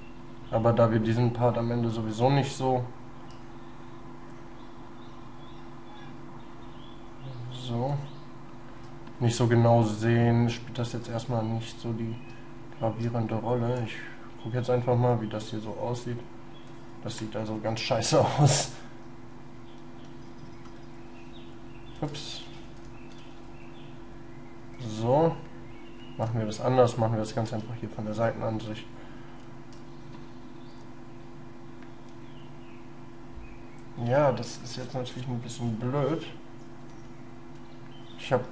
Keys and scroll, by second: 9.9 shift+space, 12.3 shift+space, 17.8 ctrl+z, 19.8 ctrl+y, 22.4 ctrl+z, 23.2 ctrl+shift+y, 27.4 shift+space, 36.9 ctrl+z, 38.2 ctrl+y.